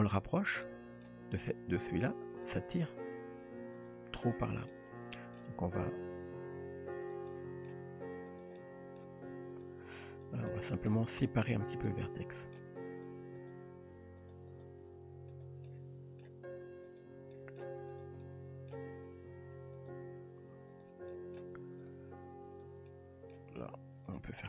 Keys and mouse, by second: 0.7 middle click, 1.3 g, 2.9 g, 4.7-5.4 middle drag, 5.6 g, 7.3 middle click, 7.8 g, 8.6 middle click, 10.2 click, 10.2 g, 10.5 middle click, 11.2 g, 11.9-12.6 middle drag, 12.9 click, 13.4 drag, 13.9 g, 14.8 g, 15.7-16.2 middle drag, 16.8 click, 17.3 middle drag, 18.0 drag, 18.2-18.7 middle drag, 18.9 g, 20.0 r, 21.1 middle click, 22.6 shift+drag, 22.9-23.3 middle drag, 23.5 g.